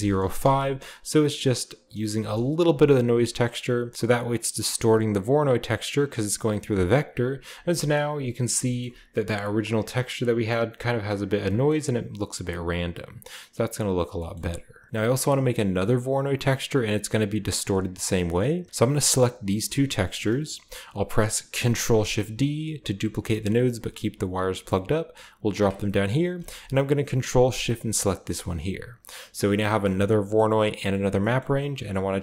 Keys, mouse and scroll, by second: 0.0-0.4 typing, 2.1 Return, 3.4 click, 5.3-5.7 drag, 5.9-6.8 drag, 7.0-7.7 drag, 7.4-10.8 scroll up 1, 7.7-8.8 shift+middle drag, 11.4-13.5 shift+middle drag, 12.5-13.5 scroll down 1, 13.5 scroll up 1, 14.0 scroll down 1, 14.1-14.9 middle drag, 16.0 click, 18.7 click, 19.0 g, 20.4 click, 21.6 shift+d, 21.7-23.0 ctrl+shift+drag, 25.4 click, 26.0-26.3 scroll up 3, 27.9 ctrl+shift+click, 28.3-29.6 ctrl+drag, 29.8-31.9 scroll up 1, 31.9-32.2 scroll up 1, 32.0-32.2 middle drag.